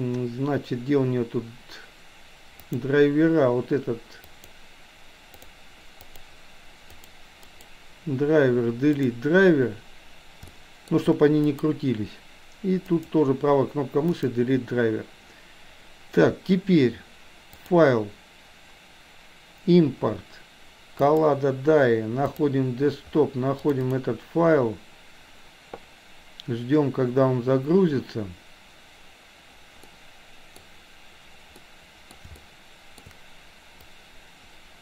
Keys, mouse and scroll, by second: 2.6 click, 4.3 click, 7.5 right click, 10.5 shift+middle click, 11.3 click, 17.6-21.3 drag, 29.8-30.6 middle drag, 31.6-32.1 middle drag, 32.3-33.0 shift+middle drag, 34.0-34.8 drag.